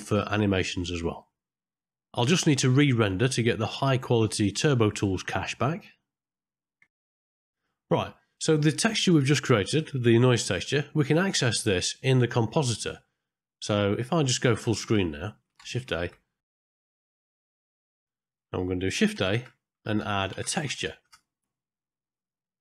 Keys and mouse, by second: 2.8 middle click, 4.9 middle click, 7.1 click, 10.9 middle click, 12.6 middle click, 15.1 click, 15.7 ctrl+space, 16.4 middle click, 16.7 click, 17.0 ctrl+middle click, 17.3 click, 17.5 click, 18.3 click, 19.1 shift+a, 22.5 middle click.